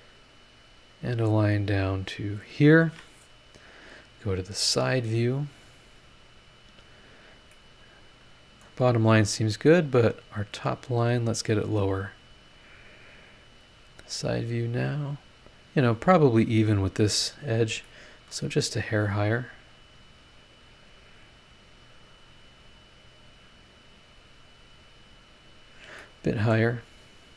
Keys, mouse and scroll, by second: 0.8 click, 2.2 click, 2.9 Escape, 4.8 click, 5.4 scroll down 1, 6.2 scroll up 1, 7.5-10.4 middle drag, 10.4 click, 13.6 click, 17.8 middle click, 17.9 click, 17.9 right click, 19.1-20.3 drag, 22.8 click, 26.0 middle click.